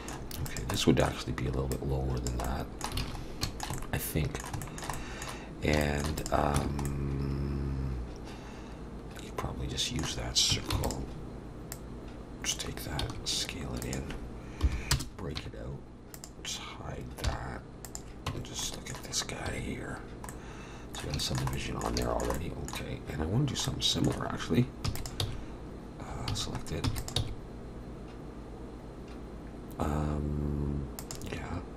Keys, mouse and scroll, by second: 0.5 click, 0.8 middle click, 1.7 click, 2.4 middle click, 3.0 alt+a, 3.2-3.6 scroll up 3, 3.4 shift+middle click, 3.7 middle click, 4.6 shift+middle click, 4.9 middle click, 5.8 shift+middle click, 6.2 click, 6.6 Tab, 6.9 middle click, 10.7 shift+d, 11.7 click, 13.1 s, 14.6 p, 15.4 Tab, 16.1 click, 17.2 h, 17.8 click, 18.3 Tab, 18.6 middle click, 19.5 1, 20.3 middle click, 21.2 shift+middle click, 21.5 middle click, 22.0 shift+middle click, 22.4 middle click, 24.3 shift+middle click, 24.9 e, 25.0 click, 25.2 s, 26.3 a, 26.9 e, 27.2 s.